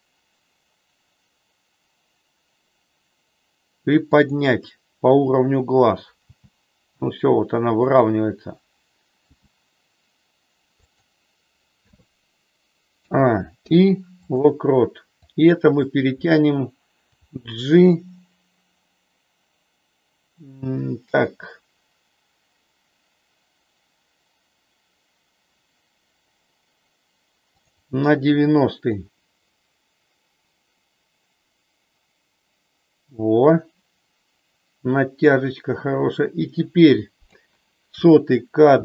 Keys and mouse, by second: 4.1 click, 6.2 g, 10.8 click, 13.0 a, 13.5 i, 15.2 click, 17.1 g, 27.5 click, 29.0-37.2 drag.